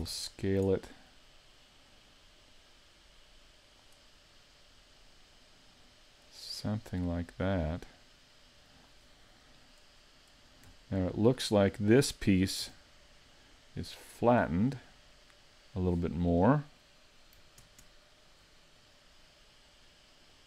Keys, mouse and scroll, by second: 14.9 r.